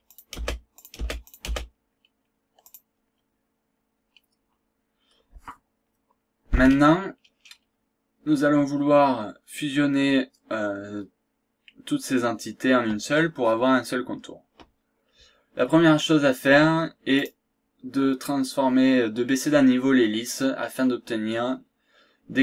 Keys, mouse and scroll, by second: 0.1 click, 0.3 space, 0.8 click, 1.2 click, 1.5 space, 1.8-2.2 scroll down 1, 2.2-2.6 scroll up 2, 3.0 scroll down 2, 3.4-3.8 scroll up 2, 4.0 scroll down 2, 4.5-4.8 scroll up 1, 6.7 scroll down 1, 7.2 scroll up 1, 17.2 click.